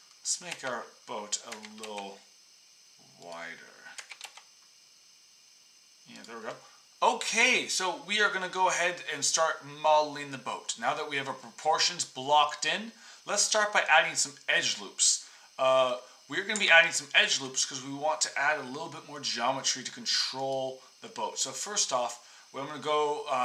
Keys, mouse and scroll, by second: 0.5 x, 1.5 s, 3.9 s, 16.5 Tab, 20.4-23.3 drag.